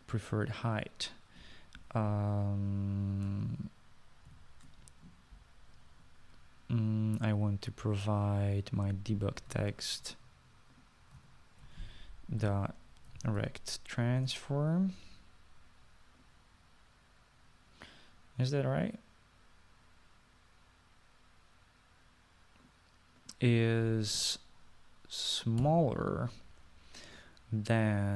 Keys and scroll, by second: 5.4 (, 10.8 ctrl+c, 12.3 ctrl+v, 13.5-14.9 typing, 15.3 Return, 26.7 <.